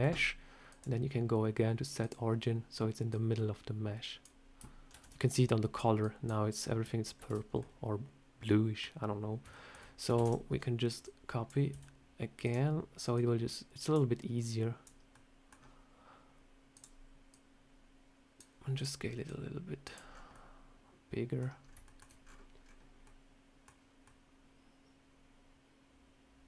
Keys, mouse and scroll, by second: 0.6 click, 3.0 click, 4.8 ctrl+z, 5.9 click, 7.1 ctrl+z, 7.4 scroll up 1, 7.5 middle click, 9.2 scroll up 1, 9.4 shift+middle click, 10.1 shift+d, 10.9 click, 11.6 s, 13.1 click, 14.4 click, 14.9 scroll up 1, 15.0 middle click, 16.6 click, 17.2 click, 18.7 click, 19.2 click, 20.0-20.4 scroll down 3, 20.2 middle click, 21.6 scroll up 2, 21.8 shift+middle click, 24.0 middle click.